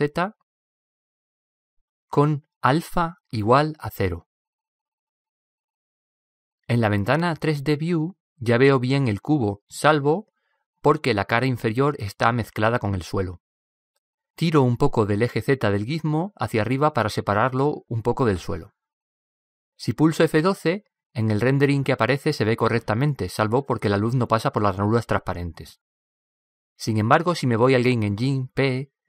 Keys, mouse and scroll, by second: 2.7-5.6 drag, 7.8-9.9 middle drag, 16.1-17.8 drag, 18.1-19.9 middle drag.